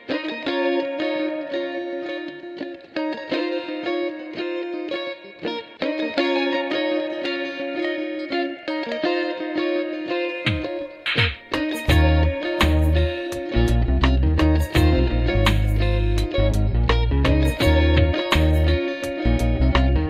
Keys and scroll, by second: 2.5 Delete, 3.0 3, 4.0 ctrl+shift+r, 8.1 F3, 14.9 F3, 16.9 ctrl+shift+c, 18.3 F3, 19.9 F3.